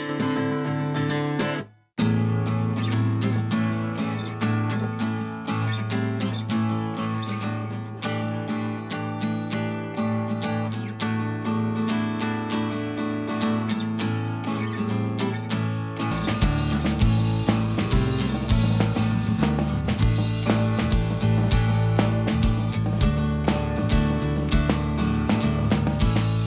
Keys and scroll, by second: 18.2 super+=.